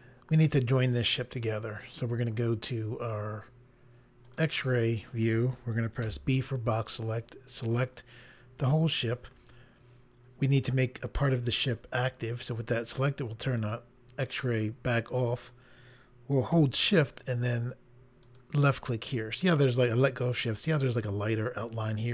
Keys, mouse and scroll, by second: 4.2 click, 6.0 b, 6.7 click, 9.9-11.1 scroll up 1, 13.6 click, 18.2 shift+click.